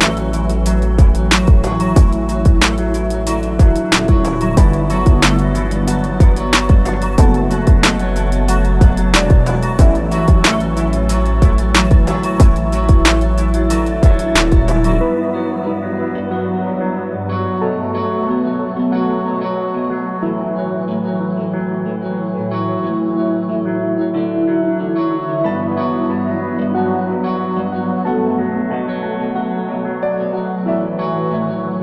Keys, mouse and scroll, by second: 5.3 click, 23.1 right click, 26.8 click.